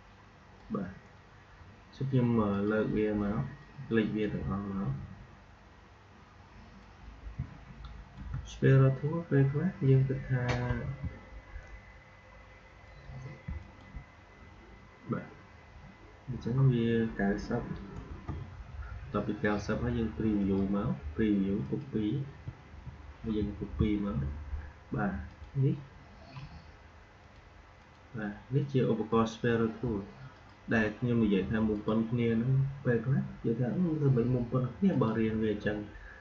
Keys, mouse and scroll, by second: 2.4-6.5 drag, 6.7-10.7 drag, 10.7 r, 13.4 r, 13.8 alt+click, 20.3 click, 23.3 ctrl+d, 25.2 click, 31.6 shift+click, 34.8 shift+click.